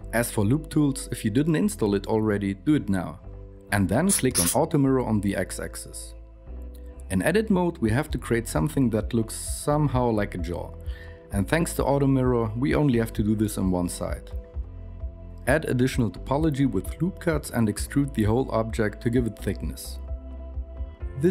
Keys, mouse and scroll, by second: 6.4 Tab, 6.7 alt+KP_1, 7.2 g, 8.3 g, 9.0 g, 12.2 ctrl+r, 13.0 s, 13.6 g, 14.2 ctrl+r, 15.0 ctrl+r, 15.5 ctrl+r, 16.1 ctrl+r, 17.1 Tab, 17.4 Tab, 18.1 a, 18.6 ctrl+z, 18.6 KP_1, 18.6 e, 20.1 KP_3, 20.4 r.